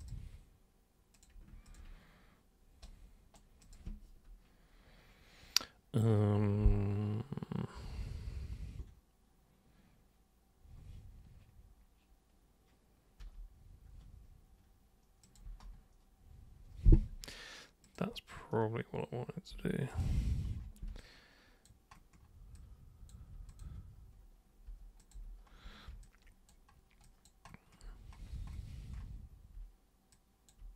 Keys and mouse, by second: 0.0 super+click, 1.1 super+click, 1.6 ctrl+shift+super+click, 2.8 super+right click, 3.6 super+click, 15.2 super+click, 17.8 super+click, 19.9 super+click, 21.0 alt+super+click, 22.5 alt+super+click, 23.5 super+click, 25.0 super+click, 26.0 alt+super+click, 27.0 alt+super+click, 30.1 alt+super+click.